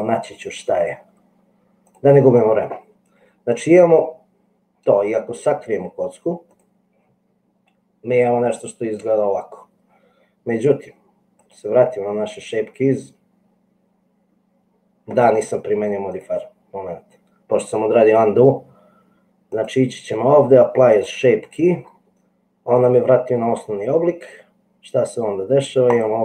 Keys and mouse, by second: 0.0-2.2 drag, 6.6 click, 16.3 click, 19.6-21.4 drag, 25.9 middle click.